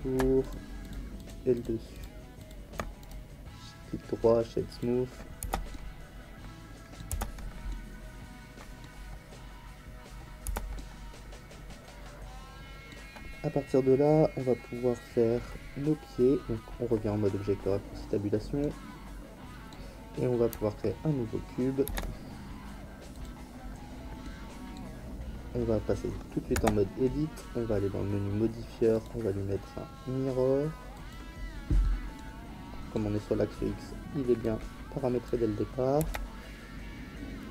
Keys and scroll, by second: 5.4 Tab, 10.4 Tab, 21.8 shift+a, 26.5 Tab, 36.0 s.